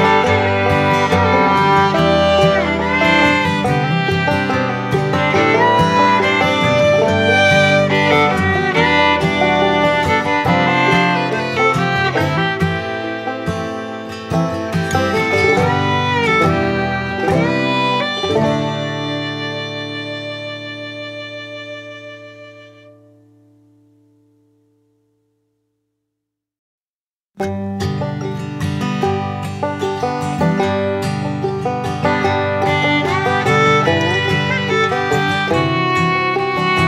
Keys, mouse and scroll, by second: 0.1 click, 3.5-10.9 drag, 14.4 right click, 15.2 click, 16.5-19.3 shift+drag, 21.6-24.4 drag, 26.6 click, 28.1-32.5 drag, 34.4-36.3 drag, 36.3-36.8 alt+drag.